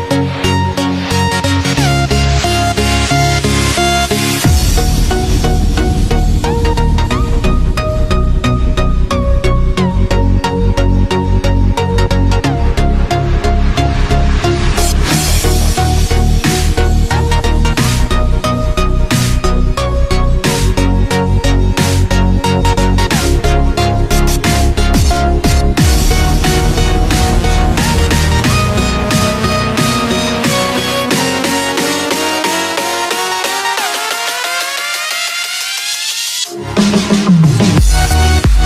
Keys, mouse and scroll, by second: 9.7 click, 10.8 click, 11.8 z, 12.9-14.9 middle drag, 14.9-16.0 scroll up 2, 16.0 click, 20.3 click, 22.7-24.1 drag, 24.3 scroll down 1, 24.6-25.9 middle drag, 25.9-26.4 scroll up 8, 26.8 click, 29.6 click, 32.4-33.5 drag, 33.6-34.1 scroll down 7, 34.1 scroll up 1, 34.2-36.3 middle drag, 36.3-37.3 scroll up 2, 37.3 click.